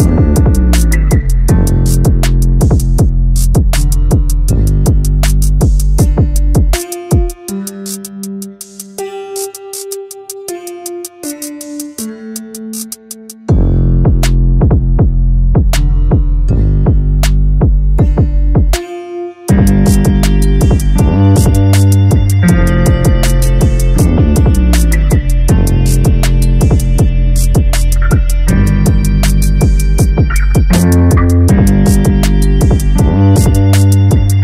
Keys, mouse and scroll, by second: 2.3 click, 4.2-6.8 drag, 6.8 a, 7.0 a, 7.7-8.5 shift+middle drag, 8.5 click, 11.5-14.0 drag, 21.1 click, 21.5-22.3 middle drag, 22.3-25.3 drag, 26.2 scroll down 1, 26.5 a, 26.7 a, 27.5-29.5 scroll up 2, 29.5 shift+middle click, 30.1-30.9 scroll down 1, 30.9 click, 33.1-34.2 drag, 34.2-34.4 middle drag.